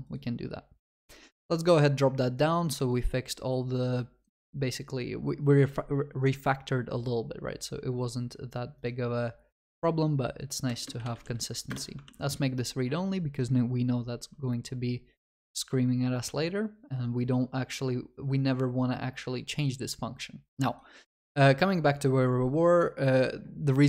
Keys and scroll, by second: 11.7 Return, 12.1 ctrl+s.